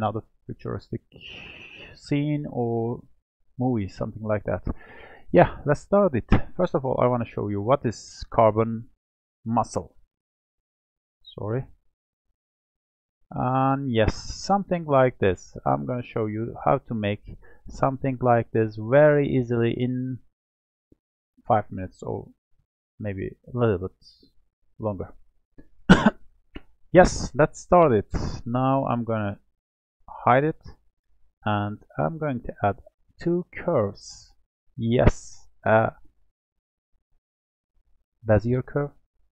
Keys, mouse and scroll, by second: 4.7 click, 5.7 click, 7.2 click, 8.4-10.1 scroll down 12, 10.1-15.0 ctrl+middle drag, 15.0-15.6 scroll up 1, 15.6-20.0 shift+middle drag, 25.5-28.4 shift+middle drag, 30.4 click, 32.0-35.2 drag.